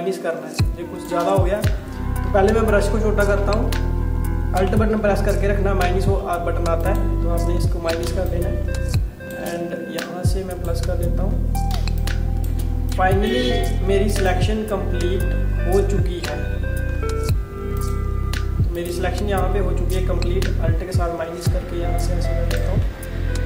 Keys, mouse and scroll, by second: 2.4-4.0 typing, 6.9 alt+click, 8.1 space, 8.3 click, 8.6 space, 10.0 click, 11.8 space, 12.0 click, 12.3 space, 13.0 click, 17.8 click, 20.0 alt+click, 23.0 alt+scroll down 1.